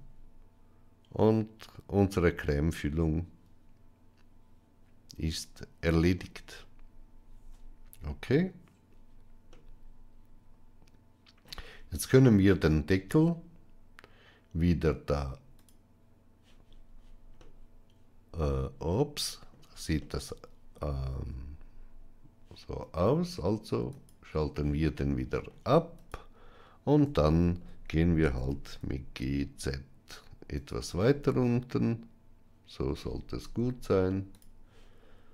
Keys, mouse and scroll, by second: 9.4-11.3 middle drag, 15.4 click, 17.3-19.4 middle drag, 19.9-21.0 shift+middle drag, 23.8 click, 24.8 middle click, 25.8 click, 27.1-27.4 shift+middle drag, 28.2 g, 30.9-32.8 middle drag, 34.2 click.